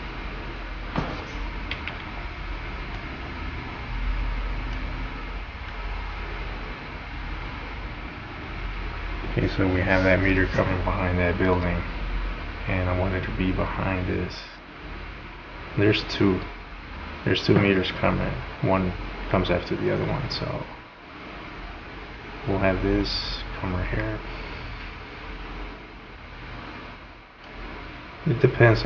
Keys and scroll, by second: 1.8 v.